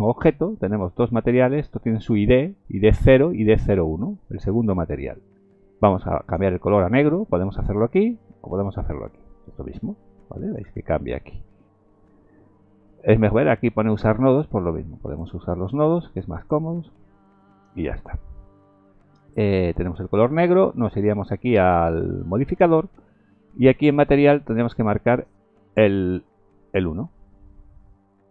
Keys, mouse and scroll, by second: 6.2 click, 9.0 click, 14.3 click, 15.1 click, 15.6 click, 16.4 click, 17.1 click, 17.9 click, 22.5 click, 26.1 click.